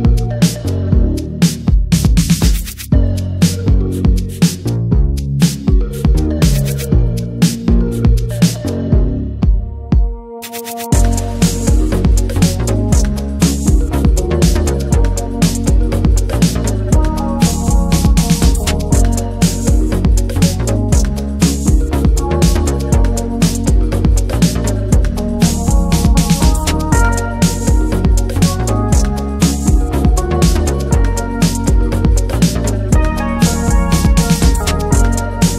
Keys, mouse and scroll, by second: 0.7 ctrl+z, 0.9-1.4 middle drag, 1.4 ctrl+b, 3.9 click, 4.1-4.7 middle drag, 4.7 3, 4.8 click, 5.0-5.3 middle drag, 5.3 ctrl+s, 5.5-6.4 middle drag, 6.4 i, 7.3-8.0 middle drag, 8.0-9.4 drag, 9.4 middle click, 9.6 s, 10.9 middle click, 11.6 click, 12.6-13.3 middle drag, 13.3 i, 14.6 middle click, 15.4 e, 16.4 middle click, 16.6 scroll up 1, 16.7 shift+middle click, 17.5 ctrl+b, 18.7 middle click, 19.0 s, 19.6 middle click, 20.1 click, 20.6 Tab, 20.7 middle click, 21.0 ctrl+a, 21.6 Tab, 21.8 click, 22.0 Tab, 22.4 ctrl+a, 22.6 Tab, 22.8 middle drag, 23.1 click, 23.3-23.7 middle drag, 23.7 ctrl+b, 27.6 click, 27.9-28.5 middle drag, 28.5 m, 28.9 Tab, 29.1 middle drag, 29.3 Tab, 29.4-30.3 middle drag, 30.3 ctrl+s, 30.7 click, 31.7 ctrl+r, 32.1-32.9 shift+middle drag, 32.9 click, 33.8-34.3 middle drag, 34.3 Tab, 34.5 Tab, 34.9 click, 35.2 alt+shift+drag, 35.4 middle click.